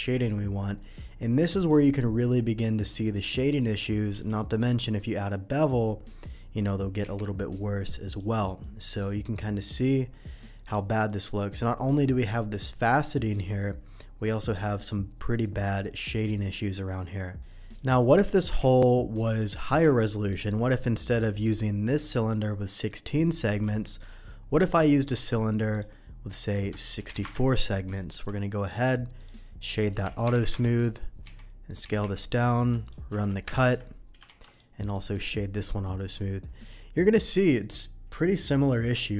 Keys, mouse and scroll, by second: 1.4-2.3 middle drag, 3.0 middle drag, 4.1 q, 4.6 click, 7.0 n, 8.0 click, 8.6-10.7 middle drag, 9.6 n, 11.0 middle drag, 13.6-14.0 middle drag, 15.4 click, 17.8 drag, 18.1 drag, 18.6 ctrl+z, 19.3 ctrl+z, 20.1 middle click, 21.1 Delete, 21.4 click, 22.1 middle drag, 22.8 middle drag, 23.6 shift+a, 25.7 click, 26.4 click, 27.2 Return, 28.8 right click, 28.8 q, 29.1 click, 29.9-32.0 typing, 30.5 Return, 31.7 click, 32.3 click, 32.8 shift+click, 33.4 ctrl+KP_Subtract, 34.2 shift+2, 34.5 click, 34.7 right click, 35.1 click, 35.6-36.1 middle drag, 36.6-36.9 middle drag, 38.1-38.4 middle drag.